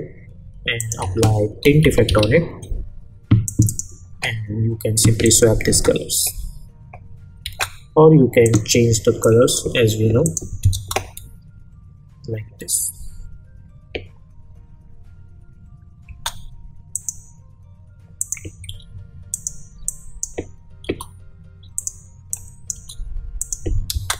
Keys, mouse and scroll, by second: 1.0 ctrl+a, 1.4-2.7 typing, 3.4 click, 5.7 space, 8.4 click, 9.6 Return, 10.2 click, 10.7 space, 16.0 space, 16.9 click, 20.8 Return, 21.7 click, 22.7 Return, 23.4 click, 23.9 space.